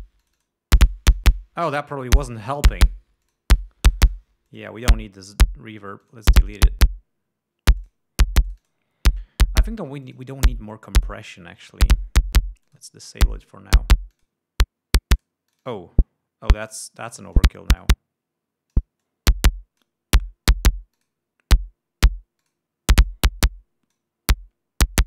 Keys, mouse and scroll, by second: 0.0 click, 0.8 click, 2.5-2.9 drag, 3.8-4.6 drag, 5.1 click, 5.5 right click, 6.6 click, 8.4 click, 9.0 click, 10.6-11.4 drag, 12.1 right click, 13.2 click, 14.0 click, 14.7 click, 15.8 click, 16.1 click, 17.8 click, 18.4-19.5 drag, 19.6-20.6 drag, 21.5 click, 23.0 click, 23.6-24.7 drag.